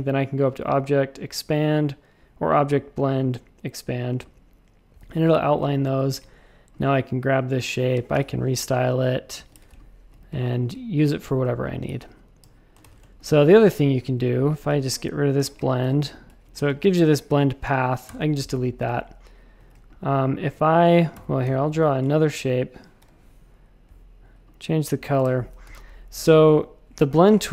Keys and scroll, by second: 5.3 shift+super+a, 5.6 space, 6.0 a, 8.1 i, 9.5 shift+super+a, 9.7 space, 10.1 a, 11.8 super+z, 12.0 super+z, 12.4 super+z, 12.8 shift+super+a, 13.0 space, 13.6 v, 14.2 v, 15.3 alt+shift+super+b, 15.8 super+a, 16.5 a, 18.0 BackSpace, 18.5 space, 19.5 a, 21.1 BackSpace, 21.4 m, 23.0 i, 25.2 shift+super+a, 25.6 x, 26.1 space, 26.5 a.